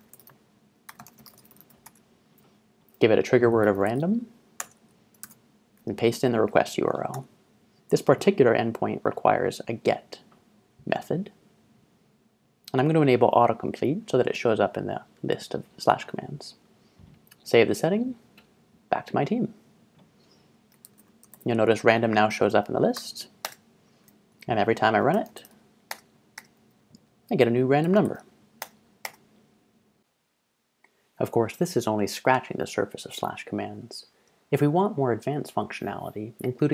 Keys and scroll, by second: 0.0-2.2 typing, 3.4-4.5 typing, 4.6 Tab, 5.3 super+v, 7.1 Tab, 20.5-21.8 typing, 23.0 Tab, 23.5 Return, 24.8-26.4 typing, 27.5-29.1 typing.